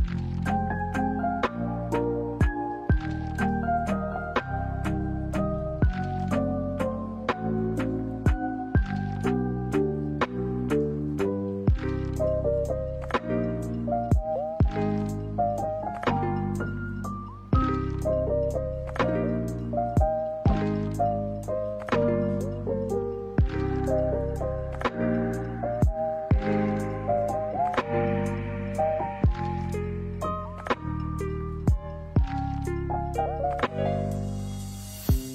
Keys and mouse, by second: 1.5 ctrl+b, 16.2 alt+right click, 17.4 ctrl+b, 22.1 middle click, 22.8 right click, 23.1 alt+right click, 24.0 ctrl+b, 27.2 middle click, 29.2 alt+right click, 30.4 ctrl+b, 33.5 middle click, 34.2 middle click.